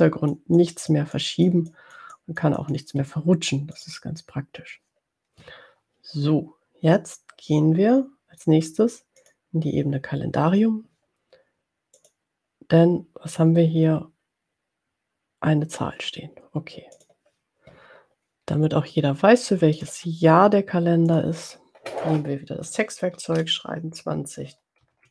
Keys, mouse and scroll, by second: 0.9-2.8 drag, 3.9 click, 9.2 click, 12.1 click, 17.3 click, 19.6 click, 21.0 click, 23.4-25.1 typing.